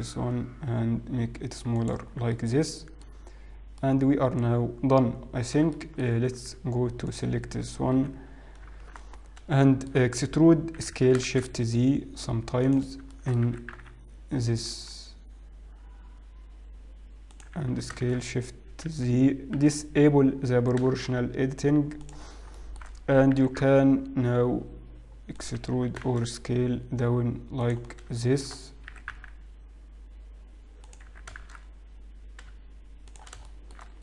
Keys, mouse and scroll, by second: 2.1 Tab, 2.4 middle click, 2.4-3.0 scroll down 4, 3.9 middle click, 5.8 shift+middle click, 6.5 Tab, 7.1 alt+click, 8.0 KP_1, 8.9 shift+z, 9.3 scroll up 5, 10.3 shift+middle click, 10.3-11.1 scroll up 1, 11.1 e, 19.1 s, 20.0 o, 20.7 s, 23.3 shift+middle click, 23.3-25.5 scroll down 3, 25.5 e, 25.9 s, 29.6 shift+middle click, 29.6-30.8 scroll down 3, 29.6 e, 31.7 s.